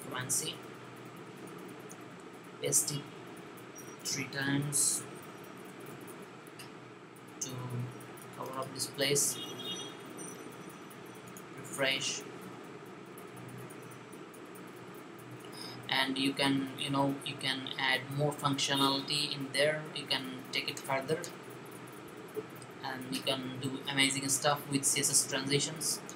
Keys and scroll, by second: 1.2 Right, 3.9 v.